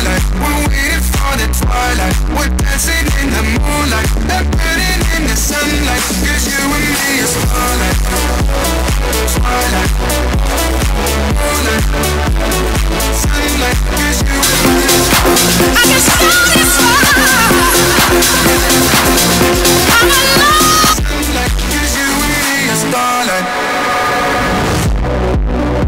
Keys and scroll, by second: 21.4 Page_Down.